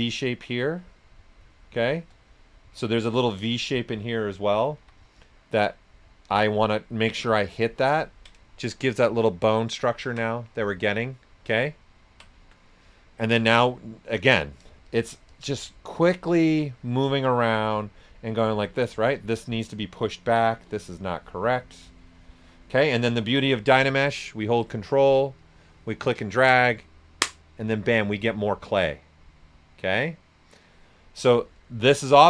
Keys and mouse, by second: 1.5 shift+click, 2.3 right click, 2.9-4.7 alt+drag, 4.7 s, 6.2 click, 6.3 shift+click, 8.0 ctrl+right click, 9.9 alt+right click, 11.0 alt+right click, 13.5 s, 13.6 click, 14.2 right click, 14.8 alt+click, 17.3 right click, 20.0-23.5 alt+drag, 23.5 right click, 23.8 right click, 25.3-29.1 ctrl+drag, 30.9 right click, 30.9 typing.